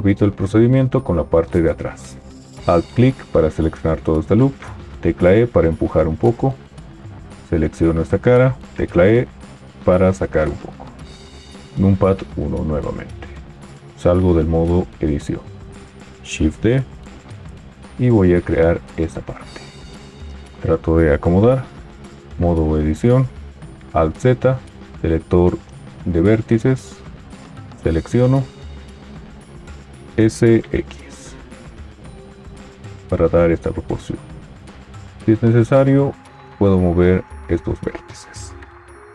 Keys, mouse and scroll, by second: 2.6 alt+click, 5.1 e, 8.7 e, 11.6 KP_1, 14.3 Tab, 16.2 shift+d, 17.8 g, 22.2 Tab, 23.9 alt+z, 30.1 s.